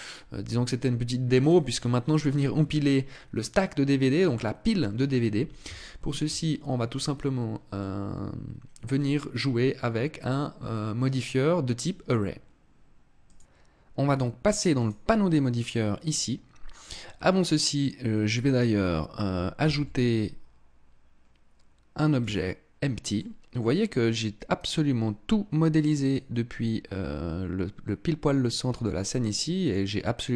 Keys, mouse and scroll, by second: 0.9 right click, 3.9 middle click, 5.4 shift+middle click, 7.3 middle click, 14.3 click, 19.2 shift+a, 22.7 middle click, 28.4 middle click.